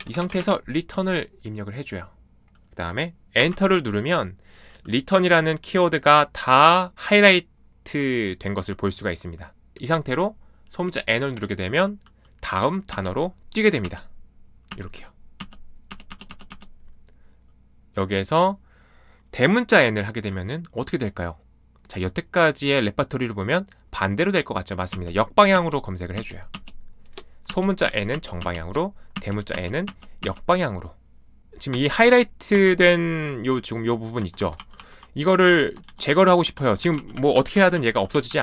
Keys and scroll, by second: 0.0-0.8 typing, 3.4 Return, 12.9 n, 13.8 n, 14.7 n, 15.9-16.5 typing, 24.9-32.5 typing, 34.1-38.4 typing.